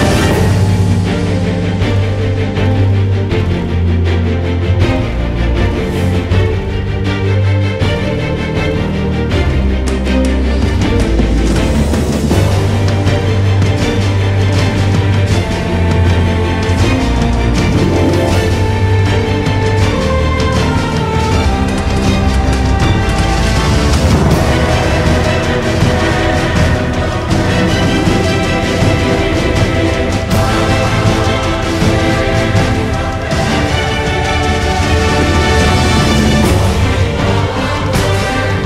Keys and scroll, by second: 6.4 Delete, 8.3 e, 8.6 r, 12.6-14.4 typing, 14.9 Return, 18.9 e, 24.0-25.3 typing, 26.7-28.1 typing, 29.7 typing.